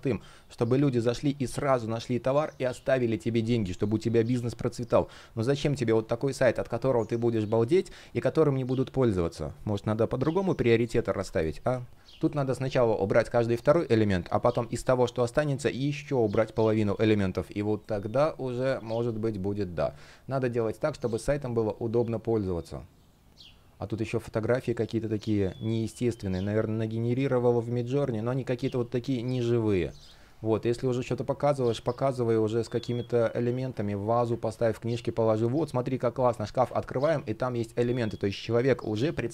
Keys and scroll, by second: 34.1 super+z, 36.3 super+z.